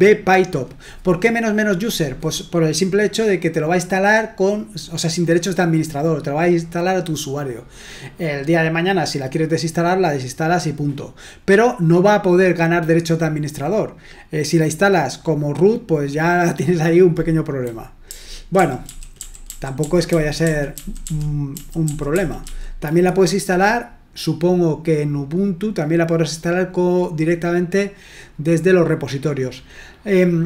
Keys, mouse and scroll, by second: 18.0 Down, 18.5 Down, 18.8 Down, 19.1 Down, 19.4 Down, 19.8 Down, 20.0 Down, 20.4 Down, 20.7 Down, 21.0 Down, 21.5 Down, 21.8 Down, 22.2 Down, 22.4 Down, 24.5-25.6 scroll down 1, 25.6-30.4 drag.